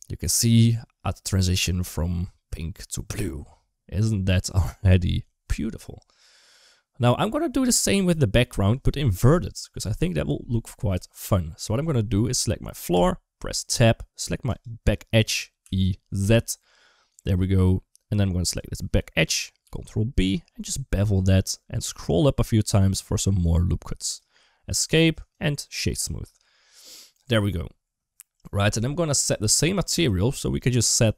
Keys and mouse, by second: 7.4 space, 10.7 click, 12.8 Tab, 13.5 2, 14.3 click, 15.4 e, 17.9 2, 18.3 click, 19.4 ctrl+b, 24.6 Tab, 25.0 right click, 29.7 click, 30.7 click.